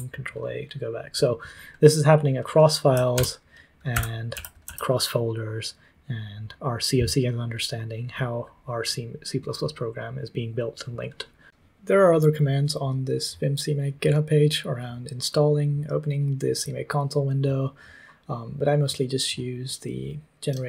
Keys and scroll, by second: 3.1 ctrl+t, 3.6-5.1 typing.